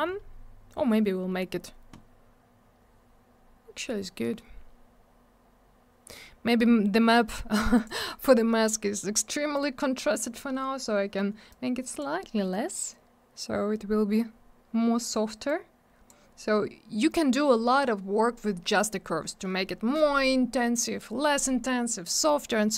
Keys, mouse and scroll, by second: 3.7-4.1 scroll up 1, 4.8-6.0 scroll down 1, 7.1 middle click, 7.2 middle click, 7.7 click, 7.8 click, 7.8 click, 7.9 double click, 9.5 click, 11.4 click, 15.4 click.